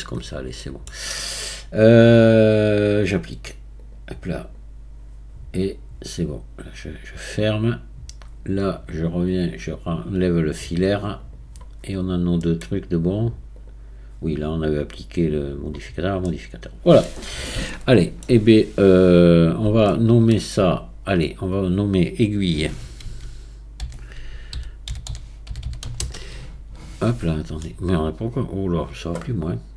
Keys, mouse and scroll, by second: 0.6-3.8 middle drag, 3.8-5.9 drag, 5.9-6.6 scroll down 3, 9.5-11.8 drag, 11.8-12.4 scroll down 3, 12.4-13.6 middle drag, 13.6 click, 15.2 click, 15.8-16.3 scroll down 4, 16.3-19.3 middle drag, 19.3 click, 19.9-21.3 shift+middle drag, 21.3 click, 23.0 a, 23.8 i, 25.6 l, 28.5 click.